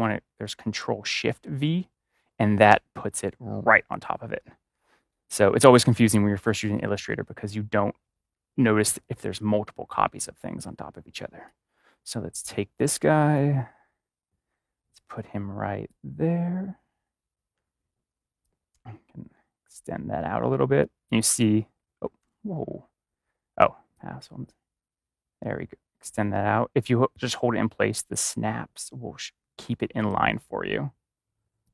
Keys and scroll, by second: 0.7 BackSpace, 1.4 ctrl+shift+v, 22.1 ctrl+z.